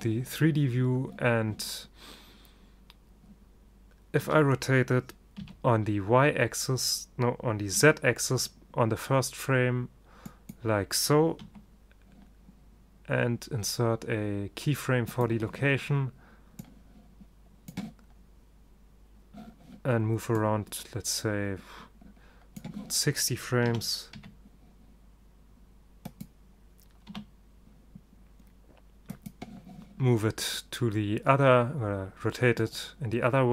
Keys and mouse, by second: 4.3 r, 8.0 middle click, 11.6 i, 16.7-18.6 drag, 20.4-22.3 drag, 23.7 r, 27.2 i, 32.7-33.5 drag.